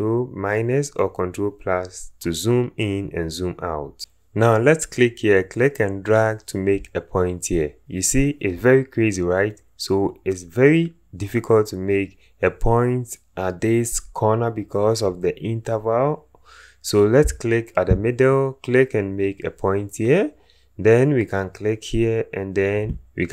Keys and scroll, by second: 16.5 ctrl+z.